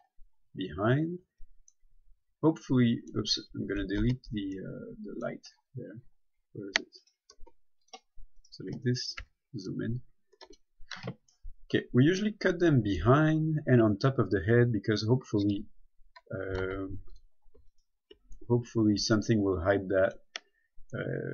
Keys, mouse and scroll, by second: 0.1 click, 1.5 a, 2.0 middle click, 3.7-4.0 scroll down 1, 4.3 Tab, 4.8 middle click, 5.8-6.3 scroll down 1, 7.2 right click, 7.7 x, 8.1 click, 8.6 right click, 10.8 Tab, 11.6 middle click, 16.6 middle click, 16.9 ctrl+Tab, 17.4 click, 18.0 alt+right click, 18.6 middle click.